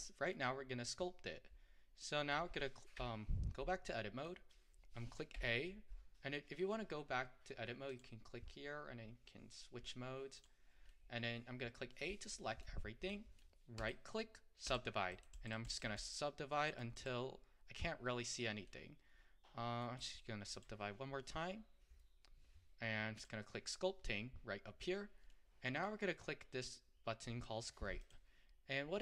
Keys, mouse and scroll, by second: 0.4-3.0 middle drag, 3.0 Tab, 3.9-5.4 middle drag, 5.4 a, 6.4-7.9 middle drag, 7.9-10.9 drag, 10.9-13.8 middle drag, 13.8-18.7 right drag, 18.7-20.1 middle drag, 20.1-23.9 right drag, 23.9 click, 25.3-28.1 middle drag, 28.1 click.